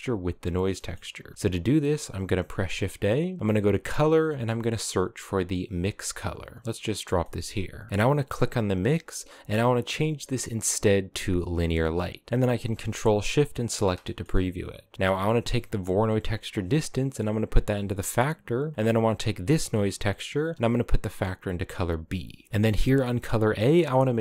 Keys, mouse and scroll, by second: 0.4 middle click, 1.2 shift+a, 6.3 click, 6.9 middle click, 7.1-7.9 scroll up 2, 8.0-11.2 drag, 13.3 ctrl+shift+click, 13.7-15.9 middle drag, 15.9 click, 18.6 click, 20.4 click, 22.0-24.1 scroll down 2, 22.2 middle click, 24.1 click.